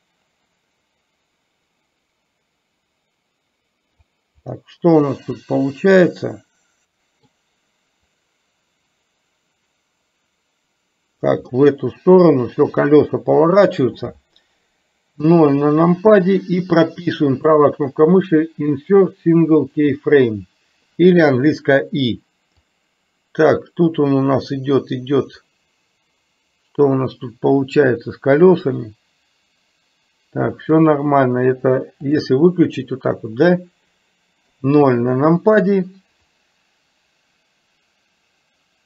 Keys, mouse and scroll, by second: 4.6-7.3 middle drag, 8.2-11.3 drag, 11.6-13.8 middle drag, 15.2 KP_0, 17.3-19.8 right drag, 22.8-25.5 drag, 28.8-30.8 middle drag, 34.5 KP_0, 36.5-38.8 drag.